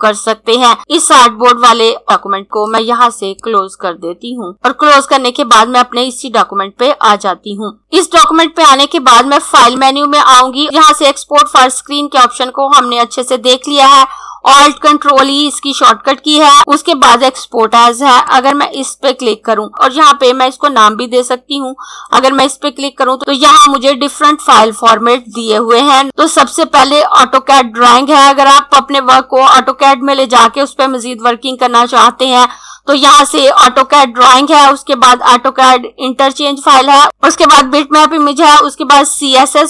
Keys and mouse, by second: 2.8 click, 7.8 click, 9.6 click, 18.3 click, 22.2 click.